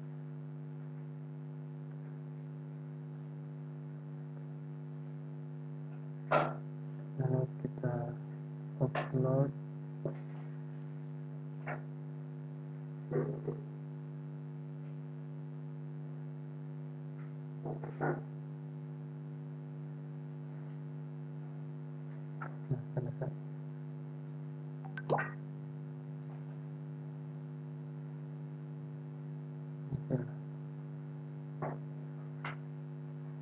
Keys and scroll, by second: 2.9 ctrl+a.